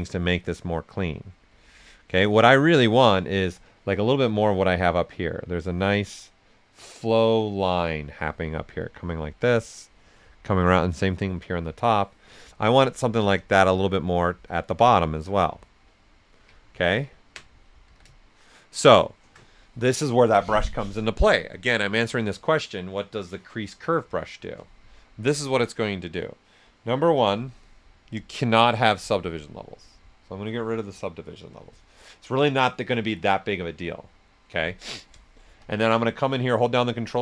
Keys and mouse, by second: 1.3 ctrl+z, 2.2 right click, 3.3 right click, 4.0-6.3 drag, 6.3-7.9 drag, 7.9 right click, 12.2 right click, 12.8-16.0 right drag, 16.6 ctrl+right click, 17.8 s, 17.9-21.9 drag, 24.8 click, 25.1 shift+f, 28.8 click, 35.1 click, 36.6 typing.